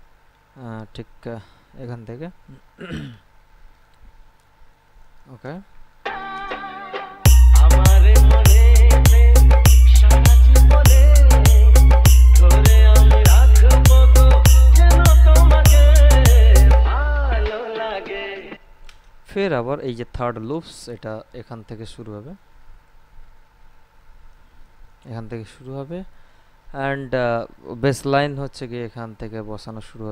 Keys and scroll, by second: 3.6 ctrl+b, 6.2 space, 18.7 space.